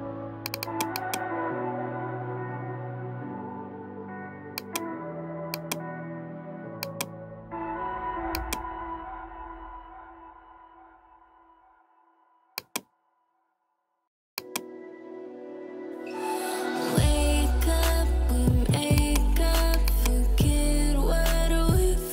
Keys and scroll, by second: 7.5 ], 21.0-21.8 typing.